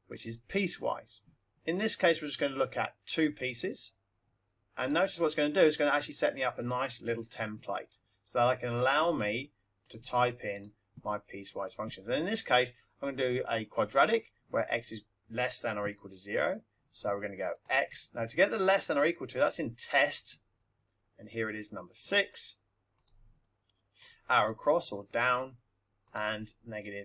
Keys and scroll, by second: 0.1 Return, 1.8 Left, 3.3 Down, 4.8 Return, 8.7 x, 10.5 Right, 22.0 6, 22.9 0, 24.0 Right.